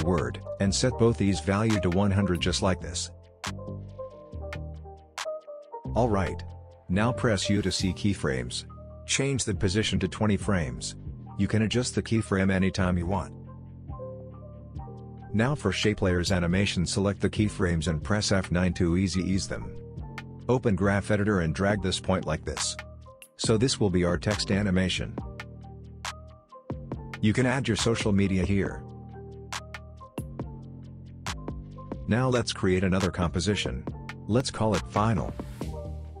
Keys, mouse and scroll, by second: 4.8 space, 5.6 click, 5.9 u, 6.6-7.1 drag, 8.6 space, 10.1 space, 10.3-11.2 drag, 13.3 space, 14.6 click, 15.1 u, 15.5-16.0 drag, 18.2 F9, 19.4-21.7 drag, 22.3 space, 23.5-25.3 scroll down 1, 25.8 click, 30.7 click, 33.4-34.8 typing, 35.5 Return.